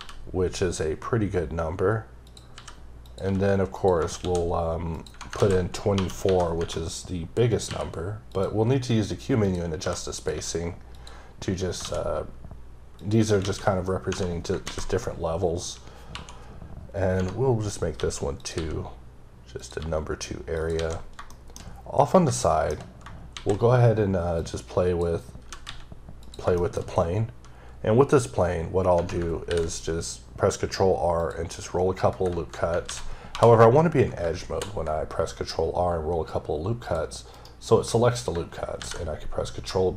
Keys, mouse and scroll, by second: 2.2 click, 2.5 s, 3.0 click, 3.2 g, 3.8 click, 4.2 shift+d, 4.9 click, 8.3 click, 9.4 click, 9.8 s, 10.1 click, 10.3 g, 10.9 click, 11.8 shift+d, 13.0 click, 13.4 ctrl+a, 14.1 Tab, 18.4 click, 18.5 s, 19.6 click, 19.8 g, 20.5 click, 20.7 alt+a, 21.0 scroll down 3, 21.3 shift+middle click, 22.4 shift+double middle click, 23.3 shift+a, 24.4 click, 25.4 g, 26.2 click, 26.6 shift+middle click, 26.8-27.8 shift+scroll up 3, 27.9-28.3 scroll down 1, 29.0 Tab, 29.7-30.5 scroll up 4, 30.5-31.2 scroll up 1, 31.2 click, 31.5 right click, 32.9 ctrl+z, 35.2-35.8 scroll up 5, 36.8 click, 37.3 right click, 38.8 ctrl+b.